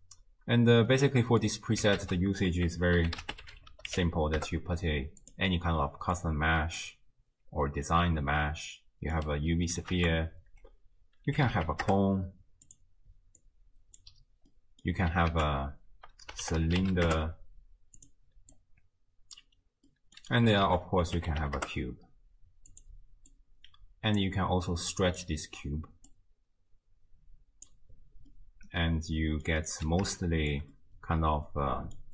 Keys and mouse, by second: 0.9-1.4 middle drag, 2.0 ctrl+a, 6.2-6.9 drag, 8.1-9.2 middle drag, 9.9 ctrl+a, 13.4-14.1 drag, 14.7 middle click, 15.3 ctrl+a, 18.5-19.5 drag, 19.9 middle click, 20.7 ctrl+a, 23.4-24.3 drag, 25.0 middle drag, 26.1-27.7 drag, 28.5-29.5 middle drag, 30.3 shift+middle click, 30.8-32.0 middle drag.